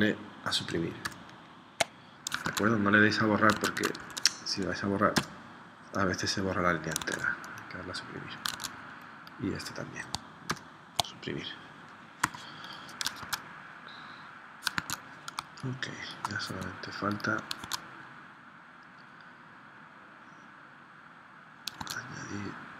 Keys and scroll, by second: 1.0 Delete, 2.4 super+Tab, 3.7 super+Tab, 4.1 super+z, 5.1 BackSpace, 7.0 super+Tab, 8.6 super+Tab, 10.5 Delete, 12.3 v, 13.3 super+Tab, 14.7 super+Tab, 15.3 space, 17.6 super+Tab, 21.8 super+Tab.